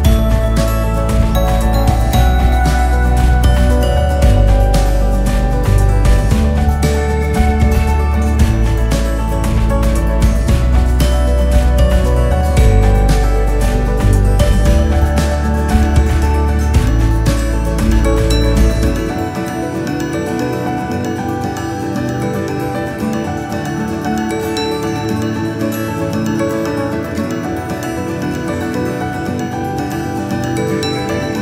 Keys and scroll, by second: 11.3 ctrl++, 12.6 ctrl++, 14.8 Up, 17.9 Up, 22.0 Up, 23.3 ctrl+0, 28.0 Up, 29.4 ctrl+0.